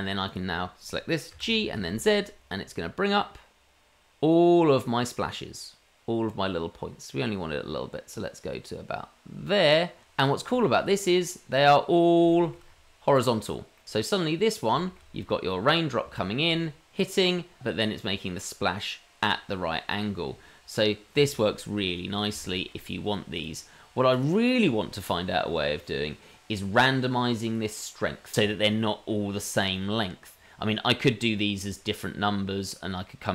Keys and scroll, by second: 1.3 g.